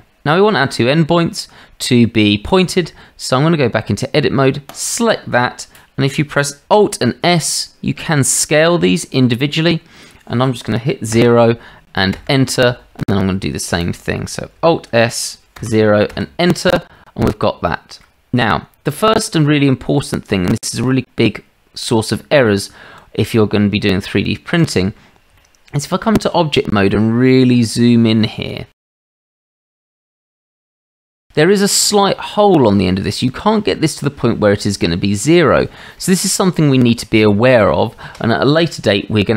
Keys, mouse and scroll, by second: 2.8 Tab, 4.7 click, 7.0 alt+s, 13.9 click, 14.9 alt+s, 17.7-18.1 shift+middle drag, 19.5 shift+middle drag, 20.9 click, 22.2 Tab, 23.9 Tab, 25.4-26.1 shift+middle drag, 28.6 shift+middle click, 29.0 click, 29.6 shift+middle drag, 30.0-30.6 ctrl+middle drag, 30.8-31.1 shift+middle drag.